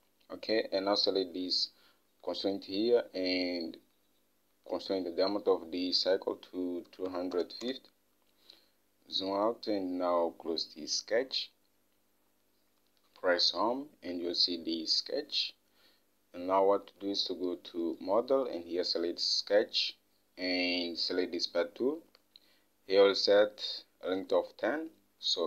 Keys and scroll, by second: 7.1-8.3 typing, 13.9 Home.